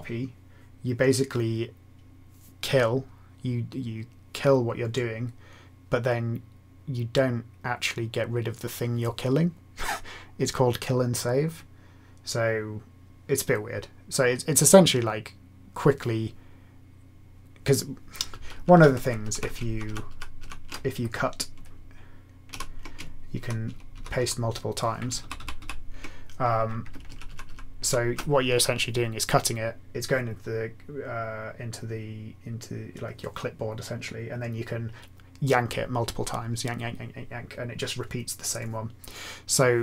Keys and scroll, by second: 18.3 Right, 18.5 Left, 18.7 Left, 19.3 Right, 19.6 ctrl+shift+Left, 19.8 ctrl+shift+Left, 20.0 ctrl+shift+Left, 20.3 ctrl+shift+Left, 22.4 ctrl+w, 23.3 ctrl+y, 23.6 ctrl+y, 23.9 ctrl+y, 24.1 ctrl+y, 25.2 ctrl+/, 25.3 ctrl+/, 25.6 ctrl+/, 27.0 ctrl+shift+Left, 27.2 ctrl+shift+Left, 27.4 ctrl+shift+Left, 27.8 ctrl+shift+Left.